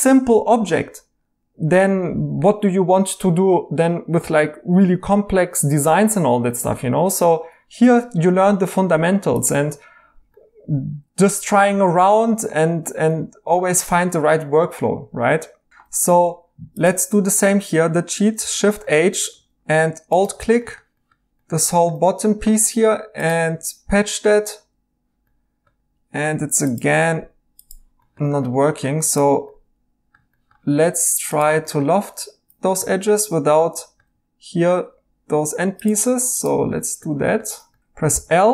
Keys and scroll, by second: 12.3 Escape, 13.9 Tab, 18.4 h, 19.3 2, 26.1 Escape, 38.1 i.